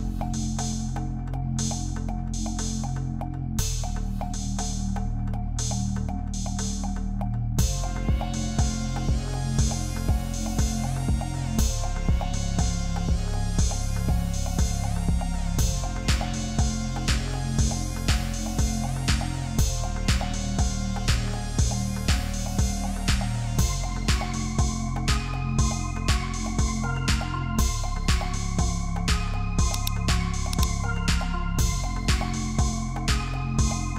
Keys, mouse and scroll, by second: 0.1 ctrl+f, 0.9 ctrl+d, 6.2 ctrl+t, 15.5 Return, 16.7 ctrl+t, 18.1 ctrl+t, 20.7 ctrl+z, 21.3 Return, 22.4 ctrl+click, 24.8 ctrl+d, 25.1-25.5 alt+scroll down 1, 27.4 F10, 30.4 ctrl+t.